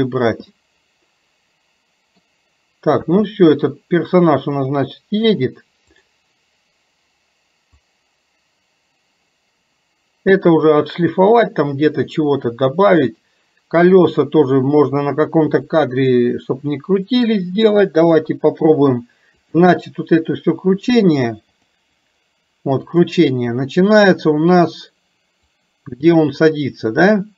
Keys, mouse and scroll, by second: 0.6-2.3 middle drag, 3.6 middle click, 6.0 click, 8.0-14.2 drag, 19.4 click, 21.7 click, 22.8 click, 25.6-27.3 drag.